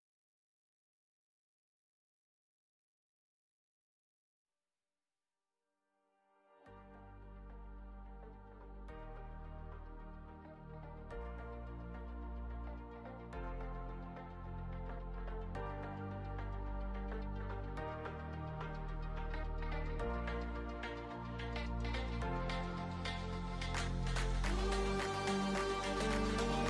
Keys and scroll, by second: 0.5-1.8 typing, 4.1-5.0 typing, 9.4-13.7 typing, 17.2-18.6 typing, 21.4-22.7 typing.